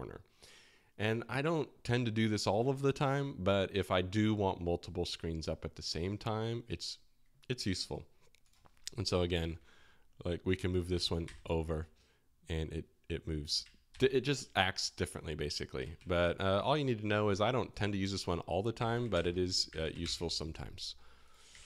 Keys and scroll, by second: 9.3 alt+h, 11.2 ctrl+alt+shift+l, 13.9 ctrl+alt+shift+k, 15.9 ctrl+alt+shift+j, 18.6-20.5 typing, 21.5 super+w.